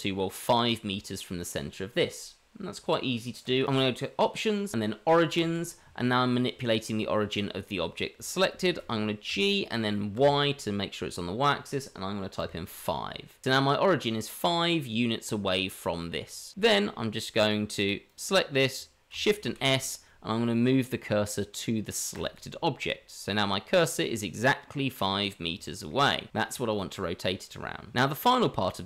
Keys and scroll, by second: 9.3 g, 19.4 shift+s.